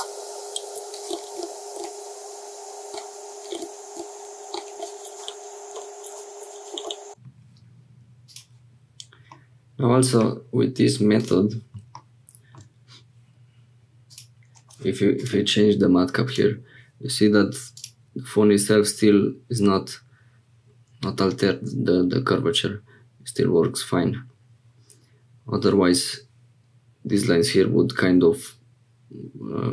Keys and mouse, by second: 1.0 g, 3.4 g, 5.2 middle click, 6.3 click, 6.8 middle click, 8.2 click, 9.3 middle click, 14.1-16.7 drag.